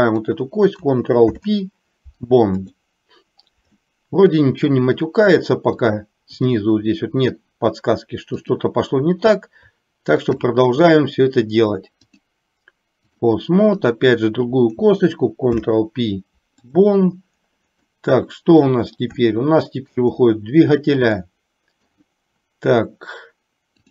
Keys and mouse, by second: 0.1 click, 1.3 ctrl+p, 4.1 middle click, 5.9 click, 8.6 click, 10.2 shift+click, 12.2-13.3 drag, 13.8 click, 15.6 ctrl+p, 18.2 middle click, 19.4 shift+middle click, 21.2 middle click.